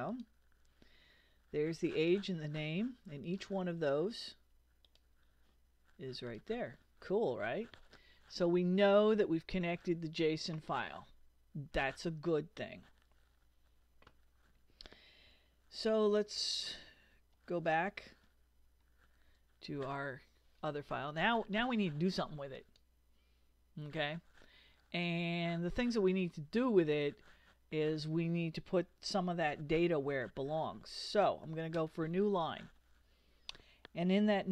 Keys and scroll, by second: 15.8 super+Tab, 31.7 Return.